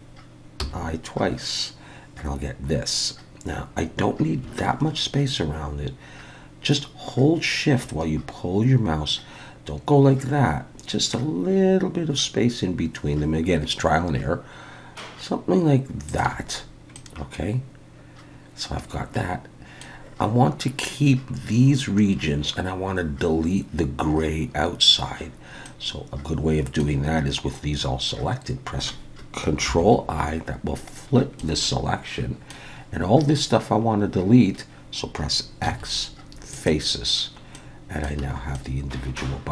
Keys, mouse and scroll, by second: 16.9 middle click, 25.7 middle click, 29.7 ctrl+i, 31.0-31.4 scroll down 1, 31.4 middle click, 32.8-33.6 scroll up 2, 33.6-34.0 scroll down 2, 35.6 x, 37.5 middle click, 38.2 a, 38.5 middle click.